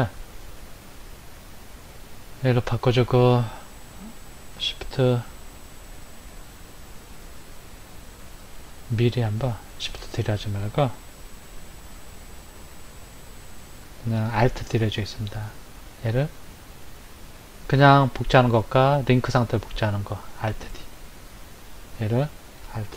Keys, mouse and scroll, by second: 2.8 click, 15.4 right click, 21.7 click.